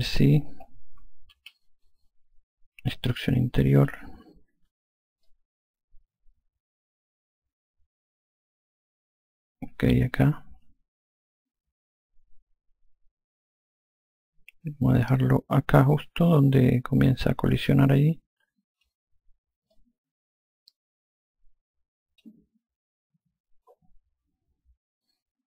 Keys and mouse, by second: 1.6 ctrl+z, 4.1 click, 5.5 click, 20.0 alt+click.